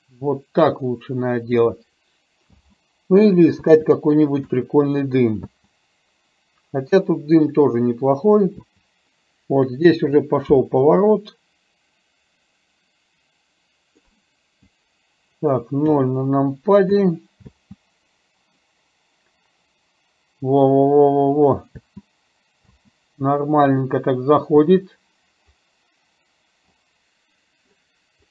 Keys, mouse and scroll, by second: 2.5 space, 3.6 space, 4.5 KP_0, 5.5 space, 8.6 space, 11.1-14.0 drag, 15.9 KP_0, 16.9 KP_0, 17.5 space, 21.8 space, 22.8 space, 24.6 space.